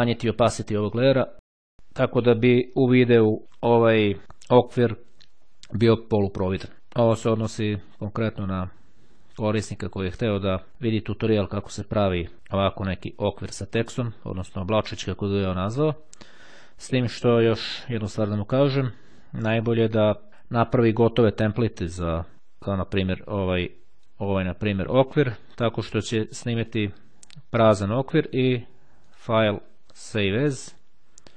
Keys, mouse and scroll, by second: 0.3-1.7 drag, 20.0 click, 22.3 click, 23.6 click, 26.6 click, 28.1 click, 29.1 click, 30.7 click.